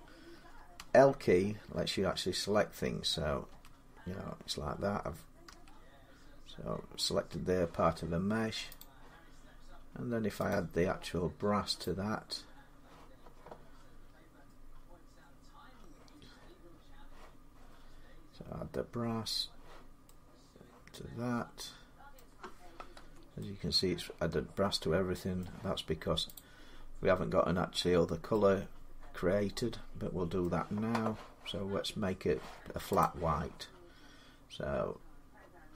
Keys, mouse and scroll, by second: 0.6 l, 3.3 l, 5.3 l, 6.9 l, 8.6 click, 10.3 click, 11.6 click, 21.9-24.8 middle drag, 22.8 Tab, 26.2 click, 27.5 scroll, 29.7 scroll down 5, 30.2 middle click, 32.8 middle click, 32.8 click.